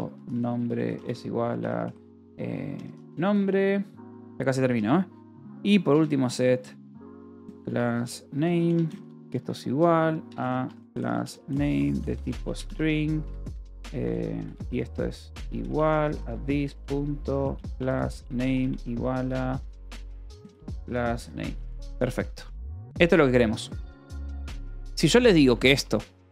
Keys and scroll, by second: 0.0-4.2 typing, 3.4 Escape, 4.5 Return, 5.7-21.4 typing, 13.0 Escape, 21.9 Escape, 22.8-26.3 typing.